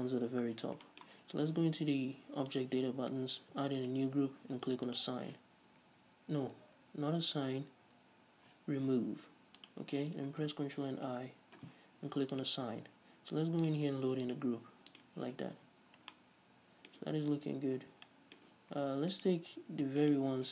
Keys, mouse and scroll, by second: 2.6 click, 2.7-3.9 middle drag, 3.9 click, 4.9 click, 5.8 a, 6.7 ctrl+z, 9.7 click, 11.1 ctrl+i, 12.4 click, 13.7-16.2 drag, 15.7 Tab, 16.2-19.2 middle drag, 17.2 Tab, 17.4-18.1 scroll up 2, 19.2 alt+right click.